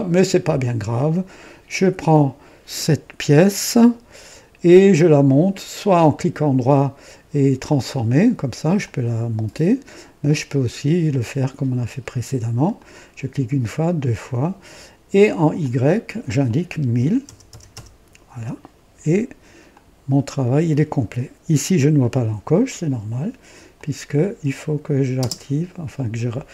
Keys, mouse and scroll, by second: 3.6 click, 5.7 right click, 7.6 click, 8.7-9.6 drag, 10.2 click, 12.7 click, 13.9 click, 15.5 click, 16.9-17.6 typing, 18.2 KP_Enter, 19.6 click, 19.8 typing, 21.7 click, 23.6 click, 25.1 typing.